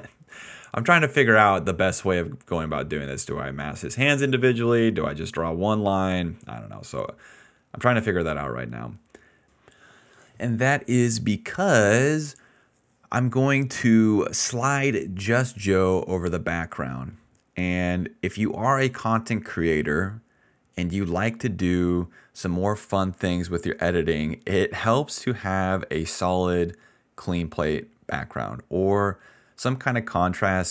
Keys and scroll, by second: 20.2 BackSpace, 20.6 BackSpace, 22.0 BackSpace, 24.8 ctrl+z, 27.0 BackSpace, 27.5 BackSpace, 29.2 ctrl+z, 29.5 ctrl+z, 29.7 ctrl+z, 29.8 ctrl+z.